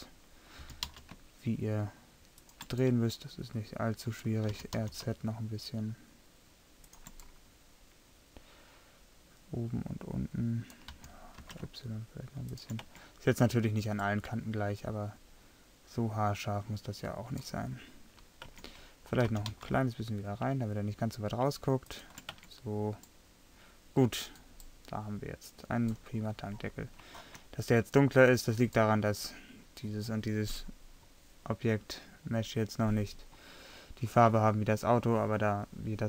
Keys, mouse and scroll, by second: 0.7 g, 3.1-4.2 middle drag, 4.6 r, 9.2 middle click, 9.8 middle click, 10.5 middle click, 10.7 middle click, 11.0 r, 12.9 Tab, 16.5-18.6 middle drag, 18.6 Tab, 19.3 g, 22.4 Tab, 27.3-28.1 middle drag, 31.4-36.0 middle drag.